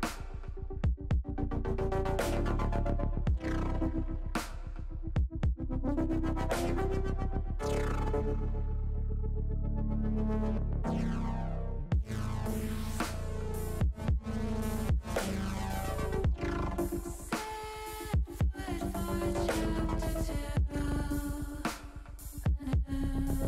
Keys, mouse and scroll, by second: 2.3-3.3 middle drag, 4.0 middle click, 5.0 middle click, 6.8-7.9 drag, 8.7 click, 9.0 middle click, 10.4-11.6 drag, 12.1 middle click, 13.9 click, 14.4-16.2 drag, 16.5-18.5 middle drag, 20.9 e.